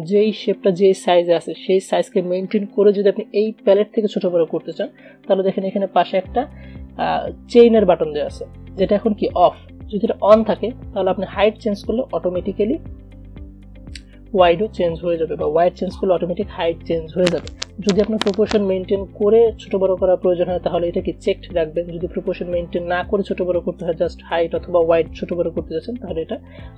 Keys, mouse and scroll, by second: 10.6 click, 15.6-26.7 drag.